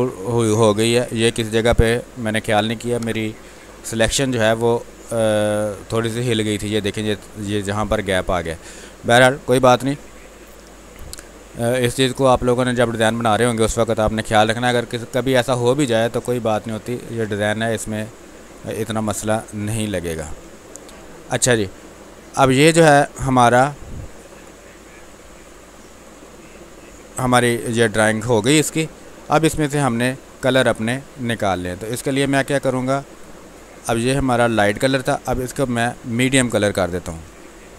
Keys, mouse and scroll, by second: 0.0-3.9 ctrl+drag, 3.9 space, 4.2 click, 4.4 space, 5.5 ctrl+click, 8.8-10.8 drag, 11.3-17.3 drag, 17.0 ctrl+Num_Lock, 17.3-18.8 ctrl+drag, 18.8-21.1 drag, 21.1 space, 22.3 ctrl+click, 25.3 click, 26.6-28.1 alt+drag, 29.4-35.2 drag, 37.2 shift+m.